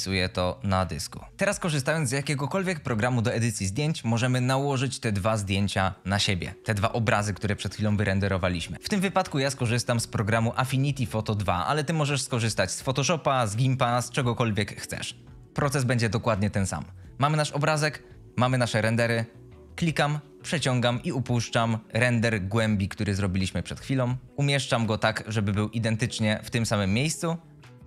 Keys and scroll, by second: 27.5 F22.